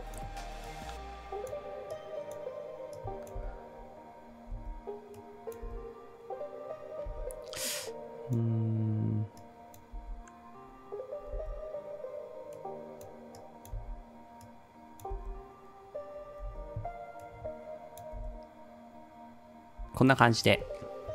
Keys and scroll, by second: 3.4 space, 4.6 space, 5.8 space, 7.1 space, 9.9 space, 11.3 space, 13.7 space, 15.1 space, 16.5 space, 18.2 space, 19.8 space, 20.5 ctrl+s.